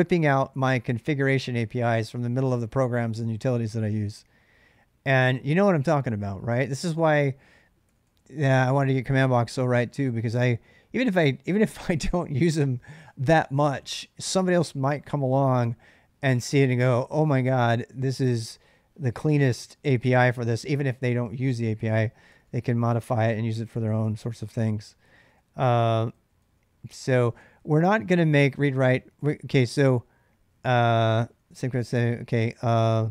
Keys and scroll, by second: 7.4-10.0 typing, 22.1-32.7 typing.